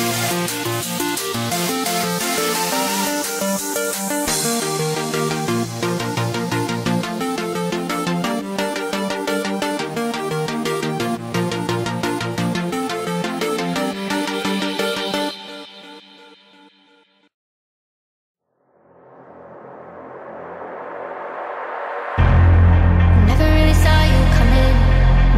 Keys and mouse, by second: 0.0 Tab, 1.0 middle click, 3.2 click, 3.9 middle click, 5.2 click, 6.1 KP_3, 10.3 click, 11.7-13.5 drag, 15.8-17.7 drag, 18.7-21.0 middle drag, 23.1 click, 24.0 click.